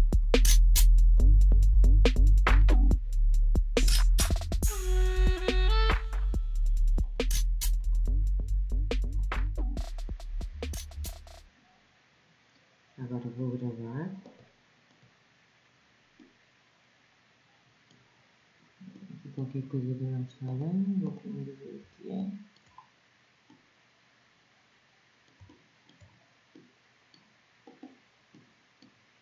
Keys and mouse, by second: 1.8 b, 4.8 b, 7.1 middle click, 7.4 middle click, 8.4-12.1 middle drag, 15.3-15.8 drag, 27.3-28.3 middle drag.